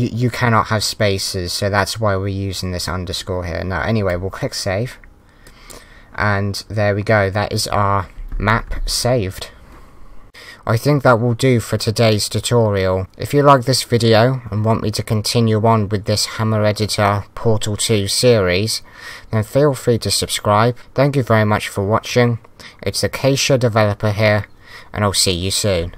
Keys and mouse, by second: 5.4 click.